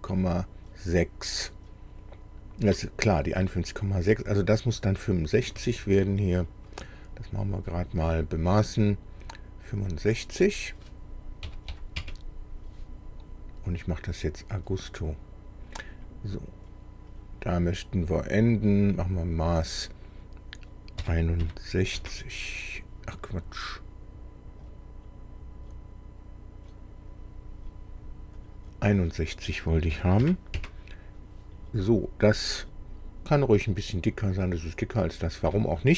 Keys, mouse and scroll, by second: 5.4 Escape, 6.4 click, 7.7 click, 9.8 click, 11.4 KP_6, 11.7 KP_5, 12.0 KP_Enter, 14.3-16.2 drag, 17.1 click, 18.9 click, 21.0 KP_6, 21.4 KP_4, 21.9 KP_Enter, 24.7 click, 28.4 click, 29.9 KP_6, 30.2 KP_1, 30.5 KP_Enter.